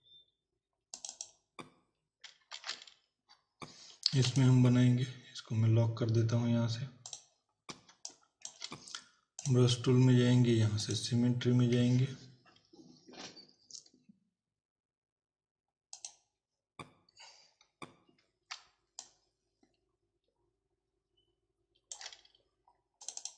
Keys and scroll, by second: 2.5 ctrl+v, 4.1 z, 7.9 space.